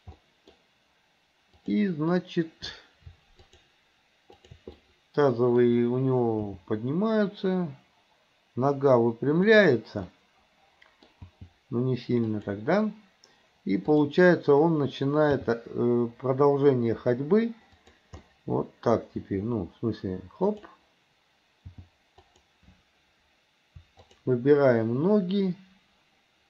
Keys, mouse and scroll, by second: 0.2 middle click, 0.6-1.6 scroll down 1, 1.6 click, 3.5 shift+click, 4.4 shift+click, 4.8 middle click, 6.5 g, 10.1-11.1 scroll up 1, 11.1 scroll down 1, 11.3 g, 13.9 click, 15.3 g, 18.2 middle click, 19.3 g, 21.8 g, 24.1 shift+click.